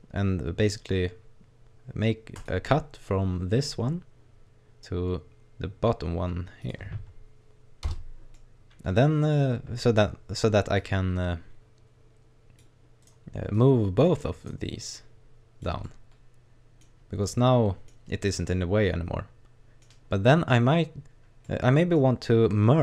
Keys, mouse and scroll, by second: 8.3 middle click, 9.7 right click, 10.8 click, 13.1 right click, 13.6 click, 14.4 right click, 15.0 click, 15.8 middle click, 16.9 scroll down 1, 17.3 middle click, 18.2 right click, 18.5 middle click, 19.9-20.4 scroll up 2, 21.1-21.4 scroll up 1, 21.5 middle click, 22.3-22.8 scroll up 1.